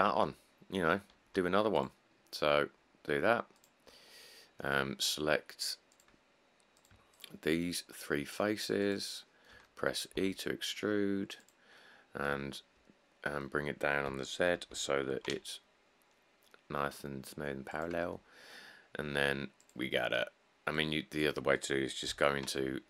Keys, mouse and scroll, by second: 0.3 Tab, 0.7 middle click, 0.8 middle click, 1.6 ctrl+r, 4.1 middle click, 7.1-9.2 shift+middle drag, 10.4 e, 14.9 g, 15.3 z, 22.3 7.